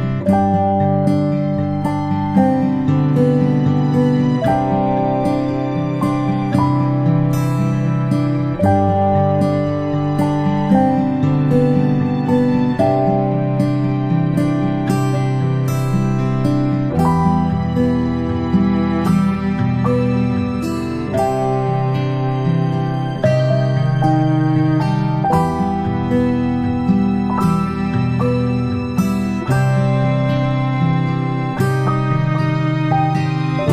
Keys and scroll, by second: 1.5 ctrl+alt+space, 2.0 ctrl+z, 2.2-2.6 space.